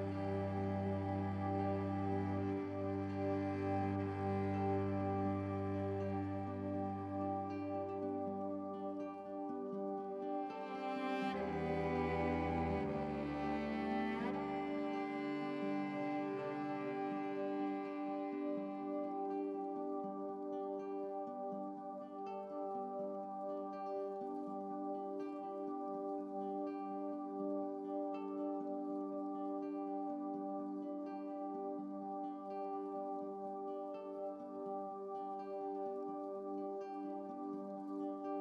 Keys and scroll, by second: 3.2 x, 18.3 ctrl+z, 18.5 ctrl+z, 18.6 ctrl+z, 18.9 ctrl+z.